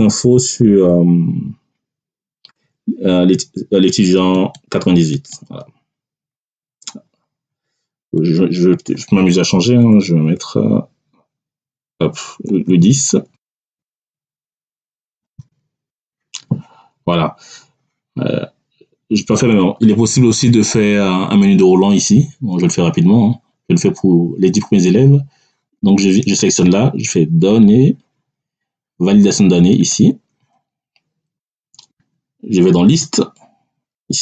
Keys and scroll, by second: 9.7 BackSpace, 12.4 2, 12.5 0, 13.2 BackSpace, 15.0 1, 15.2 0, 15.8 Tab.